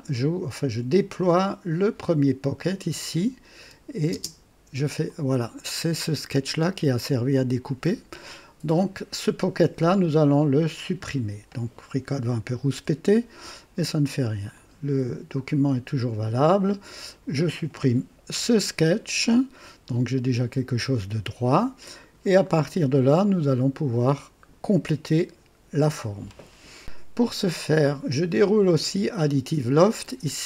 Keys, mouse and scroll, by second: 2.0 click, 3.0 click, 4.1 space, 5.0-7.9 drag, 8.2 click, 10.8 click, 12.7 Delete, 14.5 click, 17.0 click, 18.3 Delete, 19.1-22.3 drag, 22.4 right click, 28.6 click.